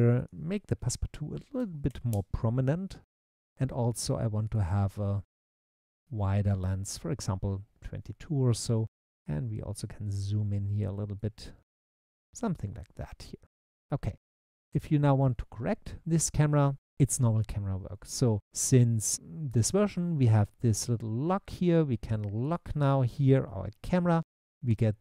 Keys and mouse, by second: 0.2-2.2 drag, 4.5-5.8 drag, 5.5 2, 22.4 click.